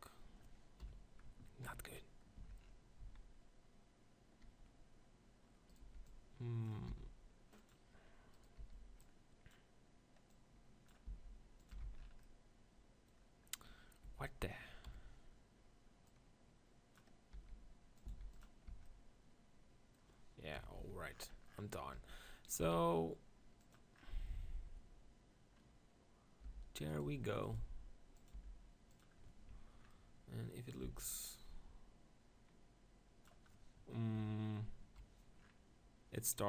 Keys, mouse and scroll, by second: 0.8 KP_1, 1.6 ctrl+KP_1, 2.4 Tab, 3.0 z, 5.8-7.2 drag, 6.0 b, 6.9 s, 7.2 right click, 7.7-9.5 drag, 8.4-9.7 right drag, 8.6 b, 11.1 s, 11.7 Tab, 11.9 z, 12.9 click, 13.4 middle click, 14.0 Tab, 14.9 KP_1, 16.1-18.0 drag, 17.5 e, 18.1 s, 18.4-20.3 drag, 18.7 Tab, 20.7 KP_7, 20.9 z, 22.1 g, 22.6-25.5 drag, 22.8 s, 25.5-26.6 middle drag, 26.4 g, 27.1 r, 27.5 g, 28.3-30.8 drag, 28.4 r, 30.8 middle click, 30.9 z, 31.3-33.1 drag, 34.1 KP_7, 34.9 KP_1, 35.4-36.4 drag.